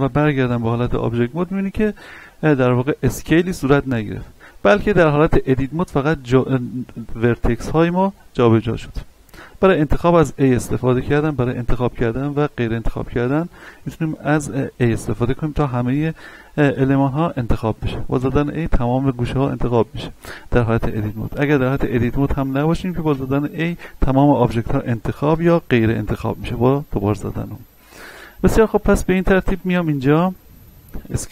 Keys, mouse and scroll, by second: 5.0 Tab, 7.3-9.3 middle drag, 9.3 a, 9.9 a, 12.0 a, 17.8 a, 21.4 Tab, 23.1 a, 23.6 a, 26.4 a, 28.4 right click, 28.8 Tab, 30.5 scroll down 1, 30.8-31.3 scroll up 1.